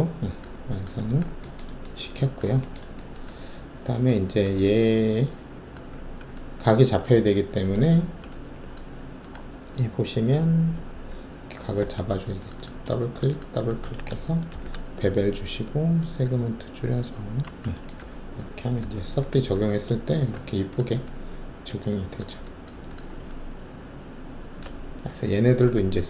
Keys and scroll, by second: 5.9 alt+`, 7.9 alt+`, 11.8 alt+2, 14.5 alt+shift+b, 17.9 ctrl+alt+`, 18.7 3.